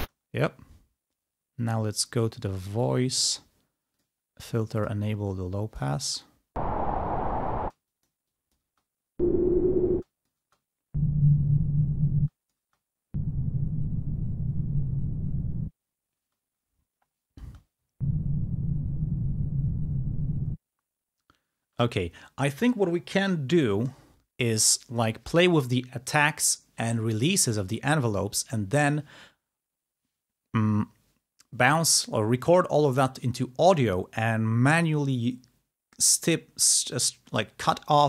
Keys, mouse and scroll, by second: 0.1 space, 2.6 click, 4.0 click, 4.8 click, 5.4 click, 6.2 space, 7.8 space, 7.9 click, 8.7 space, 10.0 click, 10.0 space, 12.2 space, 12.5 click, 16.3 space, 17.4 space, 21.7 space.